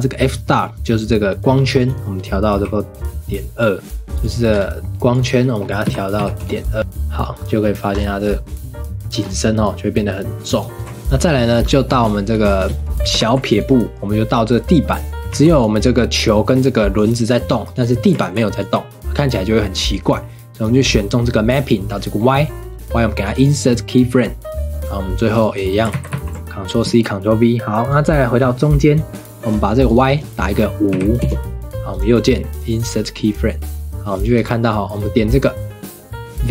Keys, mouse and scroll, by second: 6.3 click, 7.9-8.3 scroll up 3, 9.1-9.5 scroll down 3, 10.7 click, 10.8 ctrl+s, 11.2-11.6 shift+middle drag, 11.6-12.1 scroll up 1, 12.1-13.2 shift+middle drag, 13.2 ctrl+s, 15.6 ctrl+s, 16.1 click, 16.6 click, 17.8 click, 18.6 ctrl+s, 20.6 click, 23.3-24.7 right drag, 24.7-25.9 drag, 25.9 ctrl+c, 26.1 ctrl+v, 27.9-31.9 drag, 31.9-33.6 right drag, 33.6-36.5 drag.